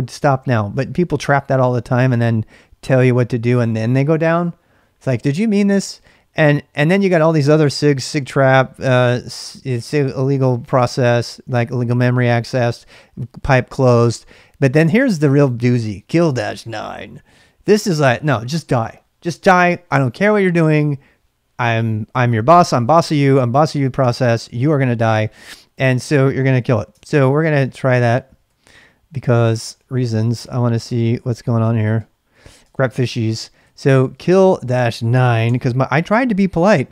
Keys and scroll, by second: 26.9 ctrl+[, 27.1 k, 27.5 k, 28.4 ctrl+c, 29.6 ctrl+[, 29.7-35.4 typing.